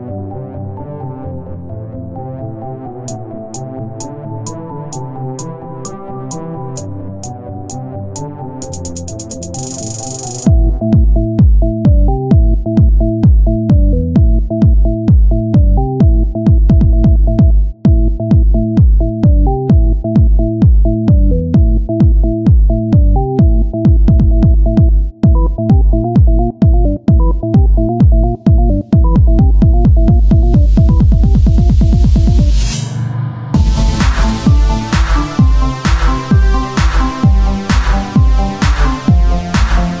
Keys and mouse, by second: 1.7 click, 3.2-4.5 drag, 17.7-19.2 right drag, 18.4 Tab, 19.2 ctrl+Tab, 19.9-22.1 right drag, 20.1 z, 20.4 c, 22.2 click, 22.7 shift+d, 23.7 KP_1, 24.8 p, 25.4 Tab, 26.2 z, 27.0 Tab, 27.0 z, 27.6 a, 30.2 r, 31.7 z, 32.2-33.9 drag, 35.4 r, 37.0 KP_1, 38.5 r, 39.7-40.0 drag.